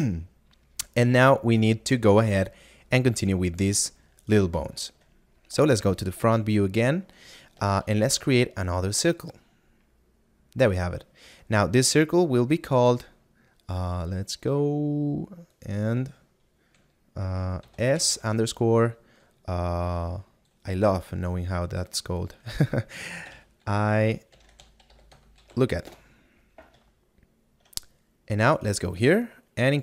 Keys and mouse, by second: 3.5 right click, 7.9 a, 9.2 click, 23.3 e, 25.1 shift+k.